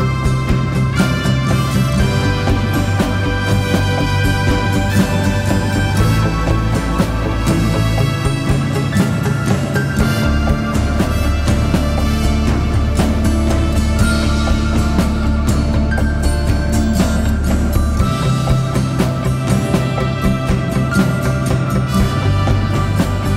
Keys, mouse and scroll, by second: 7.9 right click, 9.8 double click.